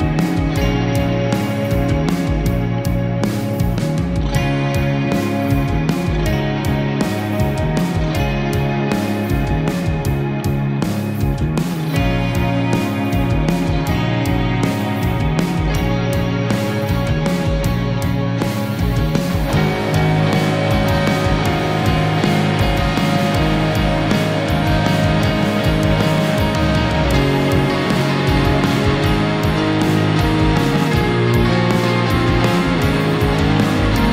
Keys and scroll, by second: 0.0 ctrl+0, 9.6 space, 19.1 ctrl+-, 21.0 ctrl+0, 26.8 space.